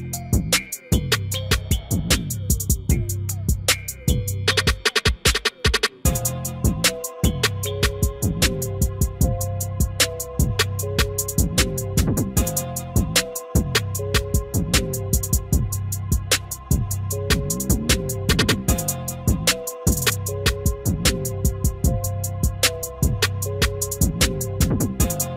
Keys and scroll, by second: 13.3 F4, 23.8 ctrl+a.